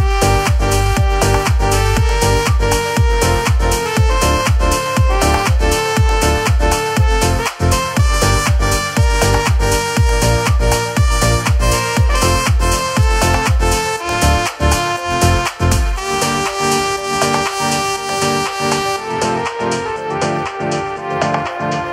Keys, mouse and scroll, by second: 2.5 click, 4.2 s, 16.5 shift+middle click.